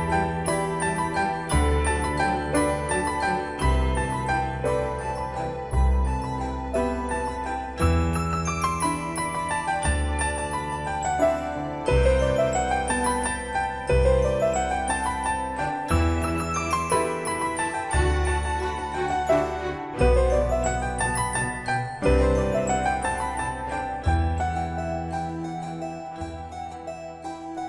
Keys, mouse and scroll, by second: 7.1-9.4 typing, 9.5 Return, 11.3 click, 15.7-17.0 typing, 17.0 click, 18.1 click, 19.2 scroll up 1, 20.0 click, 20.6-20.9 scroll down 1, 21.8 middle click, 23.4 j, 24.5 Return, 25.7 click.